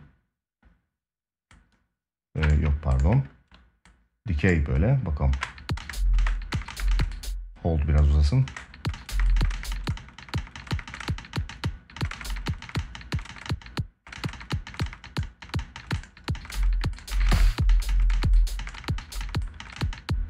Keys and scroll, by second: 5.0 space, 8.2 space, 16.8 space.